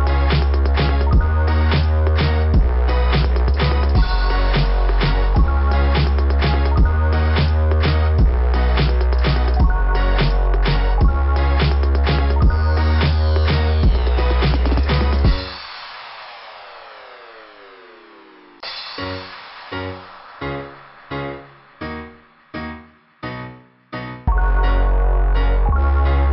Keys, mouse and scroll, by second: 0.5 click, 1.5 click, 3.6 click, 4.7 click, 9.1 click, 13.0 scroll down 2, 13.0 typing, 13.4 scroll up 1, 15.5 click, 15.6 click, 17.5 click, 17.6 click, 20.6 [, 20.6 ].